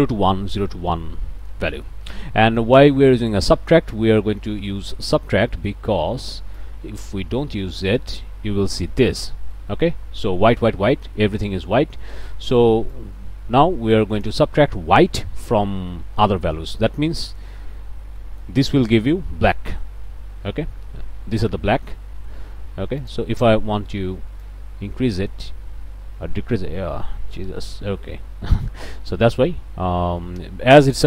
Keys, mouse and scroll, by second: 1.4 click, 2.5 click, 3.3 click, 5.5 click, 6.6-8.0 drag, 8.7 scroll down 1, 9.5 middle click, 11.0 click, 11.7 click, 12.9-14.5 drag, 16.6 scroll up 2, 17.5 scroll up 2, 18.2 click, 23.0 click, 24.4-31.0 drag.